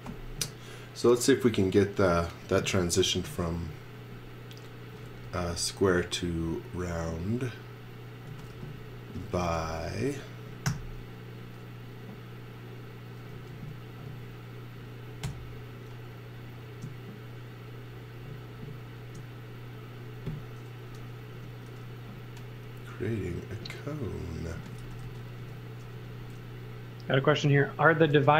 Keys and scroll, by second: 5.0 x, 5.3 v, 8.3-10.7 typing, 13.3 space, 14.4 space, 15.2 i, 21.3 e, 24.3-25.8 typing, 26.9 b, 28.1 space.